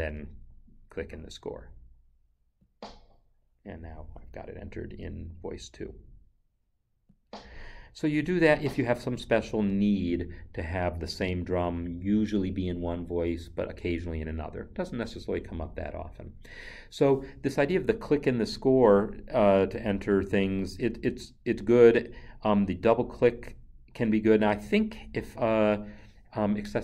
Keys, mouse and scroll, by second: 2.6 click, 7.1 click.